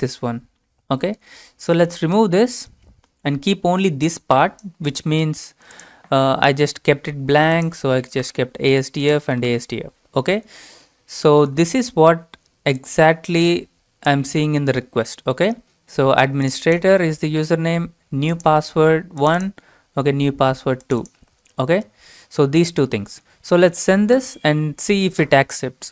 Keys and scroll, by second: 2.2 BackSpace, 7.8-10.0 typing, 11.5 alt+Tab.